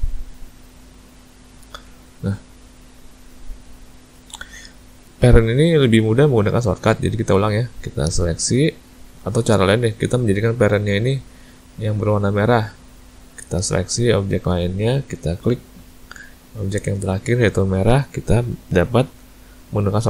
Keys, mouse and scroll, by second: 0.6 click, 1.9 ctrl+z, 2.6 click, 3.3 click, 4.3 click, 4.9 click, 7.2 click, 8.5 shift+click, 9.9 click, 11.2 click, 12.5 click, 13.8 shift+click, 14.7 click, 15.8 shift+click.